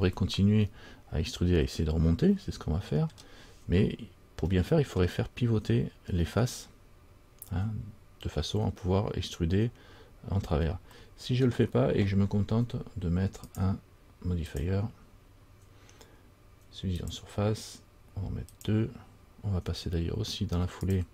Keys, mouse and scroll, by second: 2.6 middle click, 2.6 scroll up 1, 5.1 middle click, 5.8-7.8 scroll up 2, 10.6-11.1 scroll down 3, 11.1 middle click, 13.7 click, 15.1 click, 18.7 click, 21.0 click.